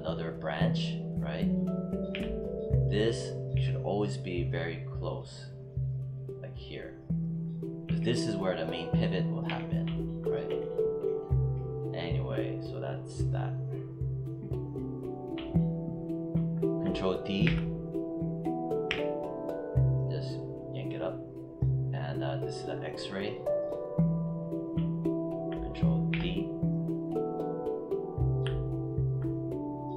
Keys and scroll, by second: 7.7 e, 9.4 z, 17.3 ctrl+d, 18.7 w, 26.0 ctrl+d.